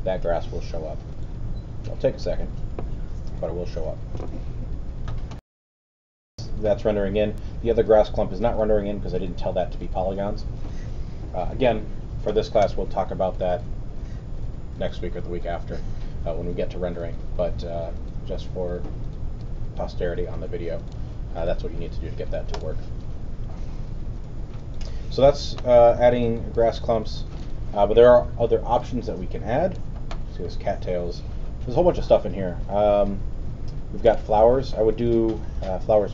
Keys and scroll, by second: 5.3 super+..